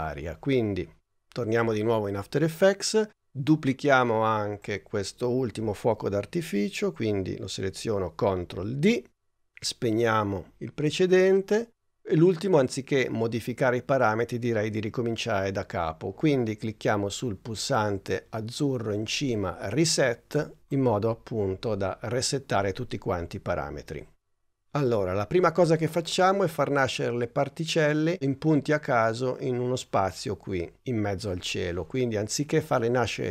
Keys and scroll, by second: 8.4 super+d.